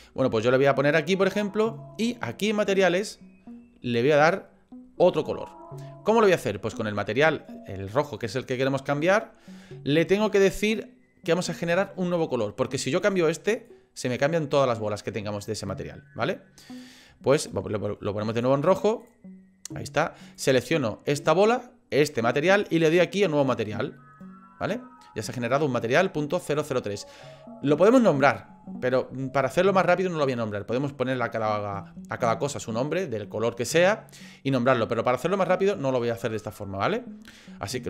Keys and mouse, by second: 2.8 click, 13.0 click, 20.4 click, 23.4-25.0 drag.